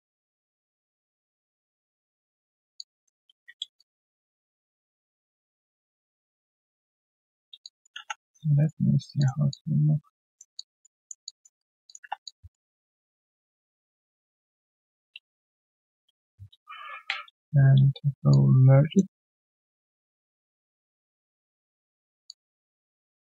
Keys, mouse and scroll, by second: 2.7 alt+click, 3.2 ctrl+z, 6.4 ctrl+z, 6.5 ctrl+z, 7.6 alt+click, 8.0 3, 8.3 right click, 8.8-9.3 scroll down 3, 9.3 q, 9.5 alt+click, 10.3 alt+click, 11.6 alt+right click, 12.0 1, 12.2 alt+click, 12.7 alt+middle click, 13.0 alt+click, 14.2 alt+right click, 14.4 alt+click, 14.7 alt+middle click, 15.1 alt+right click, 15.3 alt+click, 17.0 alt+click, 17.2 ctrl+shift+q, 22.2 alt+click, 22.8 alt+middle click.